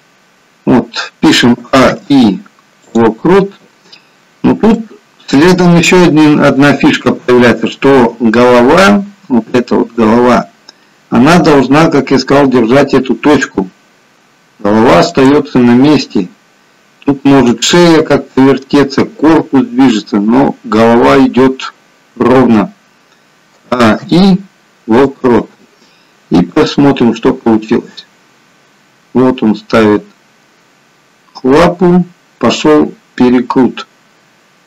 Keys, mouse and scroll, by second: 1.5 a, 1.9 i, 3.7-4.5 scroll up 2, 4.7 shift+middle click, 6.1-6.6 scroll down 1, 9.9 click, 13.7 r, 23.5 a, 23.9 i, 26.7 click.